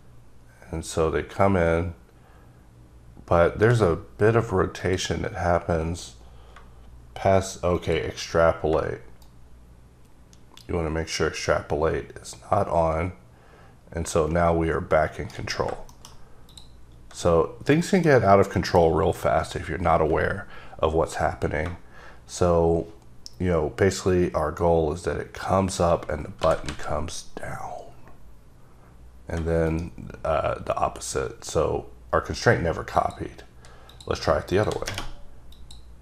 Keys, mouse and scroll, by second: 0.0 shift+right click, 4.9 click, 7.9 click, 9.7-15.5 shift+right drag, 15.8 scroll down 1, 16.0 middle click, 16.6 click, 18.0 middle click, 18.7 middle click, 20.2-21.1 scroll up 1, 21.1-21.9 scroll down 1, 22.5 shift+right click, 26.6 g, 26.8 z, 29.8 right click, 31.0 scroll up 1, 33.1 click, 34.0 click, 34.7 shift+click, 35.7 click.